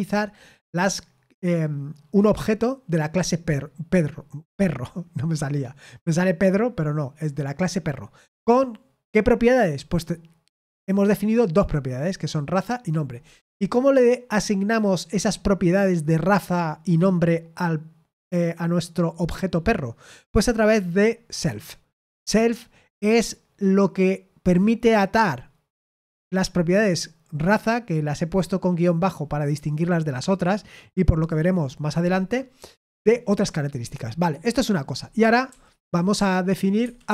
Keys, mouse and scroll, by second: 35.2-37.1 typing, 36.8 Escape.